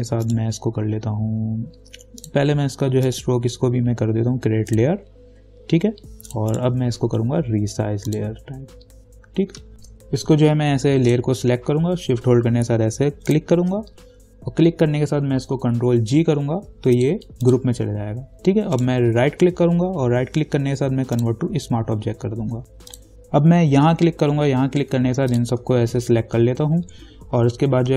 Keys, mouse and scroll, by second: 0.5 right click, 2.4 click, 3.3 right click, 4.9 click, 6.7 right click, 8.3 click, 11.3 click, 13.5 shift+click, 16.3 ctrl+g, 17.2 click, 18.9 right click, 21.3 click, 23.1 click, 24.1 scroll down 1, 25.5 shift+click.